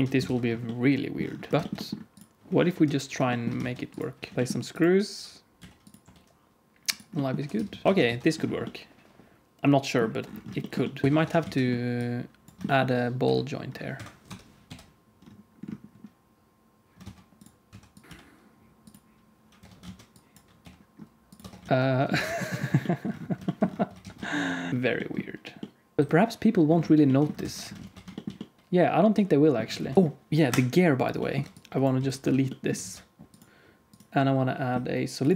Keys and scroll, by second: 0.2 ctrl+s, 1.5 ctrl+s, 1.5 alt+shift+z, 2.6-4.3 typing, 4.3 alt+r, 4.3 alt+a, 4.3 Tab, 5.5 g, 5.9 r, 7.3 r, 7.8 alt+a, 7.8 ctrl+s, 8.0 ctrl+s, 11.0 KP_1, 11.0 KP_3, 11.1 Tab, 11.3 alt+z, 13.1 g, 14.2 o, 14.6 g, 16.8 Tab, 16.8 alt+a, 16.8 ctrl+s, 16.8 alt+z, 17.0-18.0 typing, 19.5 Tab, 19.7 alt+z, 20.5 g, 21.3 Tab, 21.5 alt+z, 21.7 ctrl+s, 22.2 ctrl+s, 23.9 alt+shift+z, 27.4 ctrl+s, 27.7 alt+shift+z, 30.4 x, 30.4 KP_Decimal, 31.3 Tab, 31.4 alt+z, 31.4 KP_1, 31.9 x, 32.1 Tab, 32.7 alt+z.